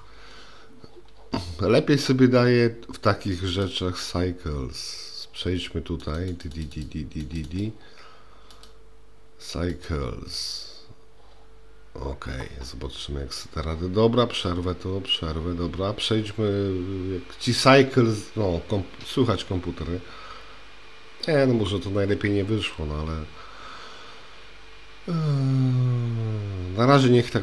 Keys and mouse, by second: 3.5-5.5 drag, 6.5 click, 6.8 click, 7.6 drag, 8.5-10.0 drag.